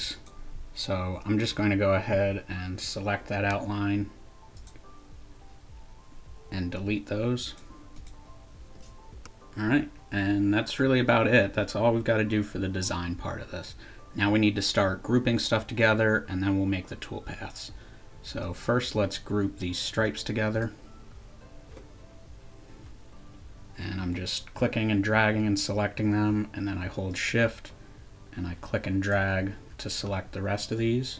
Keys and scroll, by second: 1.5 shift+BackSpace, 3.2 Delete, 9.1 Delete.